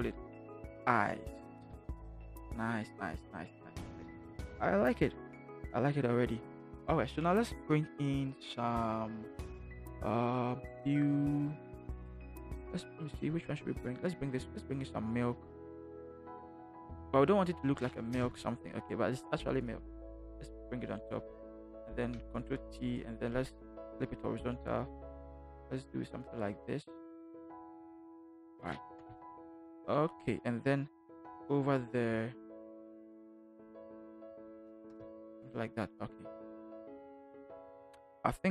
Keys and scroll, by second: 0.3 i, 1.1 e, 1.6 Return, 18.1 Return, 22.4 ctrl+t, 29.0 Return, 33.0 ctrl+t.